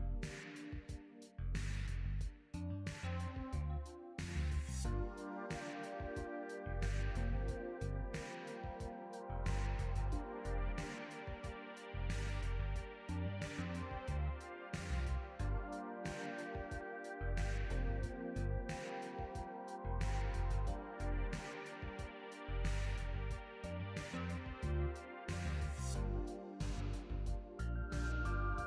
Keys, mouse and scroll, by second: 0.0-1.0 scroll down 2, 1.0 click, 2.5 click, 4.1 click, 9.6 click, 10.3-11.7 scroll down 3, 11.7 click, 13.6-14.6 scroll down 2, 14.6 click, 16.3 click, 17.1-17.7 scroll down 2, 19.9 click, 25.5 middle click, 26.9 click, 27.9 middle click, 28.5-28.6 scroll up 1.